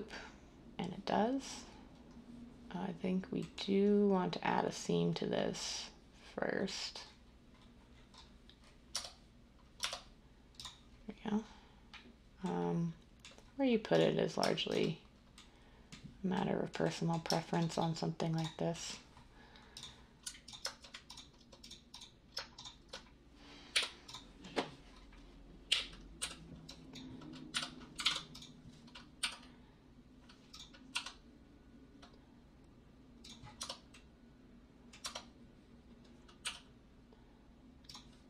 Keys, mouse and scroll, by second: 8.9 Tab, 9.7 Tab, 23.7 u, 25.7 n, 26.1 n, 27.5-28.0 typing, 29.1 g, 30.9 s, 33.5 Tab, 35.0 Tab, 36.4 g.